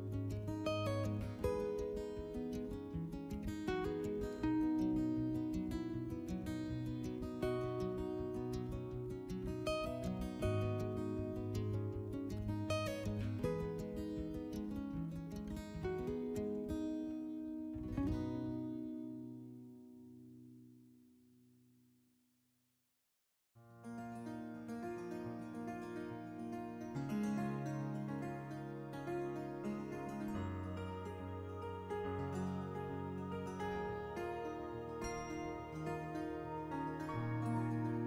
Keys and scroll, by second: 0.4 s, 4.3 s, 6.2 3, 8.2 ctrl+shift+z, 8.8 s, 11.0 s, 12.3 s, 13.2 s, 13.8 s, 17.5 3, 17.8 s, 19.5 3, 20.4 s, 24.3 s, 26.4 s, 27.5 s, 28.8-29.7 typing, 31.6 s, 34.1-35.0 typing, 36.0 s.